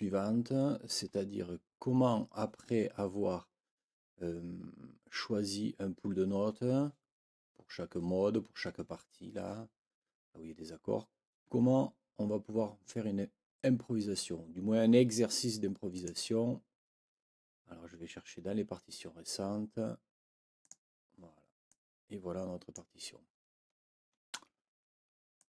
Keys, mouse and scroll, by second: 15.9 click, 20.6 click, 21.6-22.9 drag, 23.0 shift+scroll up 2, 23.7 shift+scroll up 2, 24.6 ctrl+scroll up 2, 25.4 ctrl+click.